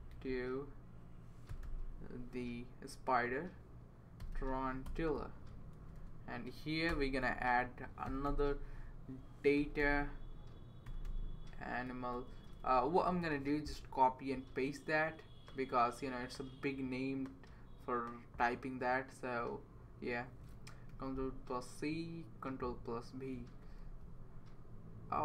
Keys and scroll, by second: 0.2 shift+', 1.2-2.1 typing, 4.0-4.9 typing, 5.5 Up, 5.8 Left, 6.9-12.6 typing, 20.9 super+c, 23.5 Right, 23.8 super+c.